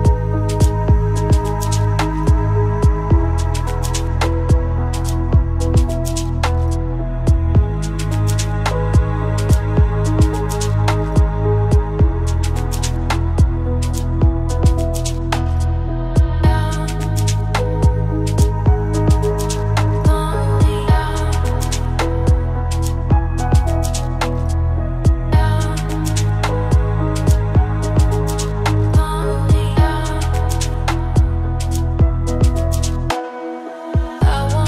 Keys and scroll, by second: 12.1 ctrl+space, 14.0 ctrl+alt+s.